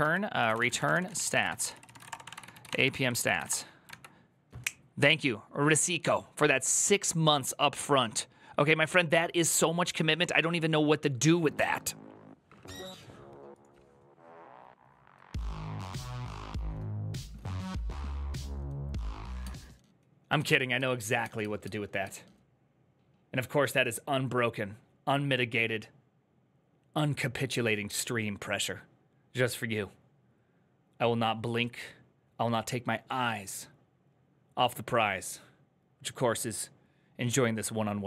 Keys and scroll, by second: 0.0-3.7 typing.